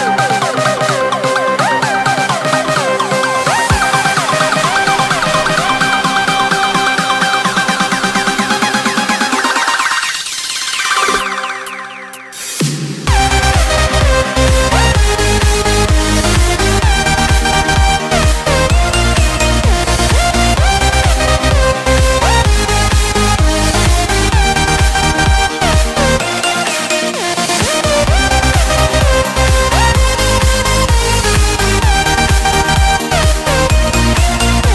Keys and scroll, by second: 1.2 ctrl+space, 7.4 ctrl+x, 8.2 ctrl+v, 11.3 ctrl+x, 12.5 ctrl+v, 16.0 ctrl+x, 17.2 ctrl+v, 19.2 ctrl+z, 20.9 ctrl+space.